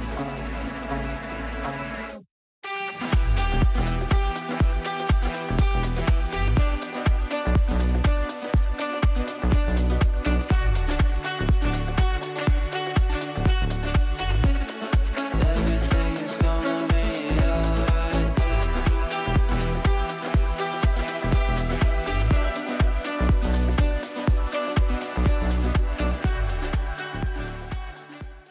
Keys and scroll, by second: 0.0 ctrl+z, 25.7 shift+F2, 26.1 Escape.